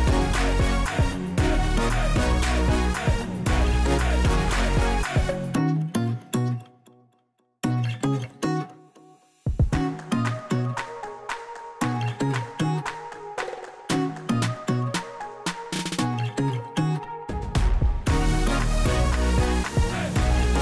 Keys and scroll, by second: 1.4 ctrl+a, 2.0-3.0 typing, 3.4 Return.